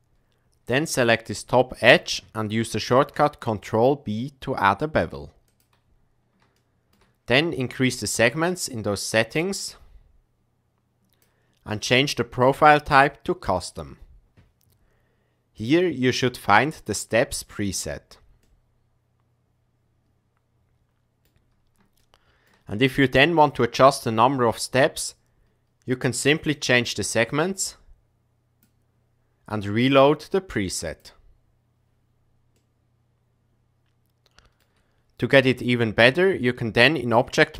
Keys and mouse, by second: 0.9 click, 2.9 ctrl+b, 6.5 shift+middle click, 7.9 click, 9.3-11.2 drag, 13.5 click, 15.5-17.7 drag, 18.6-21.3 middle drag, 22.1 shift+middle click, 26.5-28.6 drag, 29.7-32.2 drag, 32.6-34.6 middle drag, 33.0 click, 35.9 Tab, 36.3 middle click, 37.4 s.